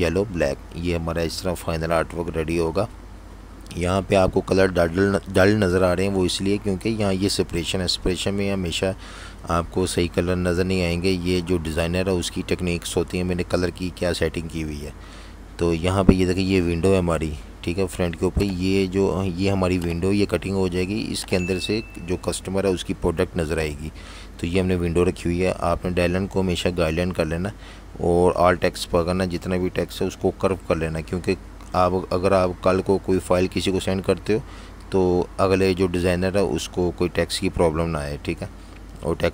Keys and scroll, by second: 1.1 i, 3.7 super+3, 6.7 super+3, 8.4 alt+super+3, 10.0 super+5, 11.3 v, 16.4 z, 17.5 v, 23.5 super+0, 38.4 z.